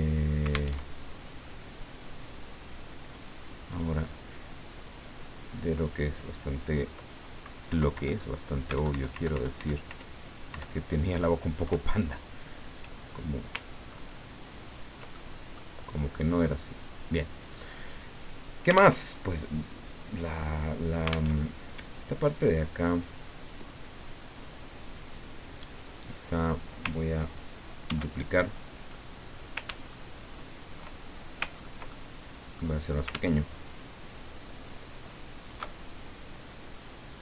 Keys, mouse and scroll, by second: 0.7 alt+Tab, 3.7 click, 4.8-6.0 drag, 7.7 Down, 7.9 Left, 8.7 alt+Up, 11.6 alt+Left, 13.9 ctrl+scroll up 2, 14.7 ctrl+scroll down 2, 15.2 ctrl+middle click, 15.9 click, 19.0 alt+Tab, 21.3 alt+Tab, 22.3 click, 27.8 ctrl+d, 29.9-30.5 ctrl+shift+scroll up 4, 31.0 ctrl+shift+scroll up 2, 31.6 ctrl+shift+scroll up 2, 31.8-32.9 ctrl+middle drag, 33.7-36.2 ctrl+shift+drag, 36.5-37.2 drag.